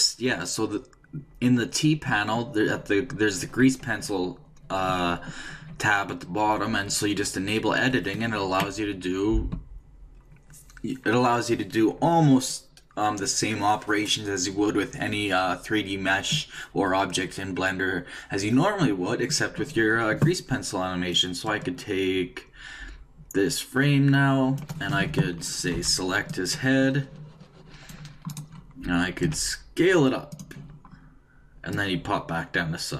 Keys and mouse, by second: 21.1-22.9 drag, 25.7 c, 28.4-30.3 right drag, 29.3 s, 31.7-32.9 drag.